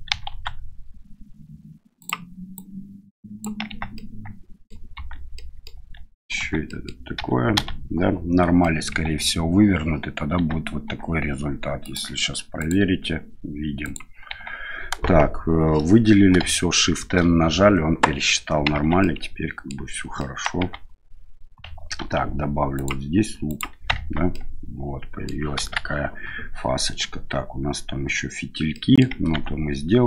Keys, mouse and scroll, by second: 0.1 e, 2.6 click, 3.7 Tab, 3.9 middle click, 4.9 Tab, 5.3 middle click, 5.8 Tab, 6.4 Tab, 6.6 middle click, 7.1 a, 7.5 a, 8.6 middle click, 9.0 Tab, 10.3 Tab, 10.9 Tab, 11.9-14.2 drag, 14.3 Tab, 17.0 shift+n, 18.7 Tab, 19.0-19.7 middle drag, 20.1 middle drag, 20.6 Tab, 22.0 ctrl+r, 24.0 Tab, 24.3-25.2 middle drag, 25.6 KP_1, 28.7 middle click, 29.3 Tab.